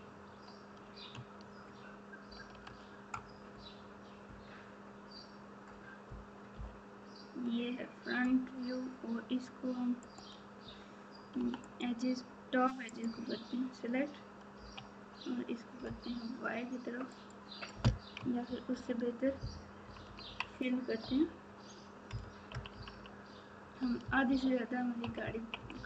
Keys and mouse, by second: 2.6 alt+z, 6.5 KP_7, 18.7 ctrl+z, 19.8 KP_6, 20.0 KP_6, 20.2 KP_6, 21.0 KP_Divide, 22.5 KP_6.